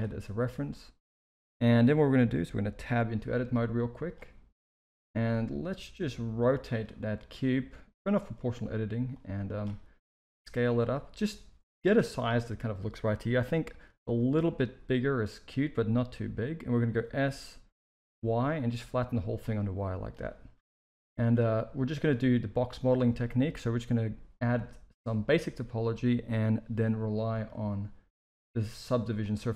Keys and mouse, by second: 0.3 shift+middle drag, 2.6 Tab, 3.2 shift+middle click, 3.7 z, 5.3 r, 7.0 middle click, 8.0 click, 9.3 click, 10.1 s, 14.0 KP_3, 16.8 s, 19.6 middle click, 20.5 KP_1, 21.7 shift+middle click, 27.3-29.3 drag.